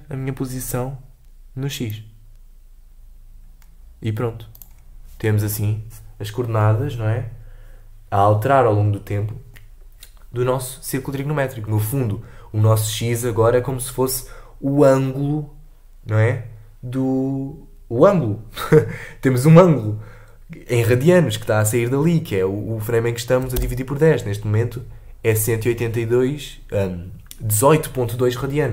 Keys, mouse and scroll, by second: 4.5 click, 23.5 space.